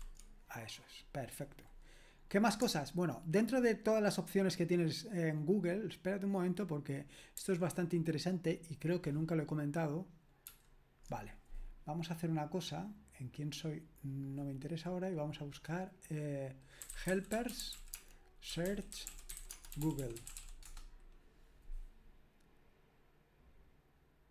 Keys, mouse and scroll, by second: 7.3 super+7, 10.5 super+8, 16.6-20.9 typing.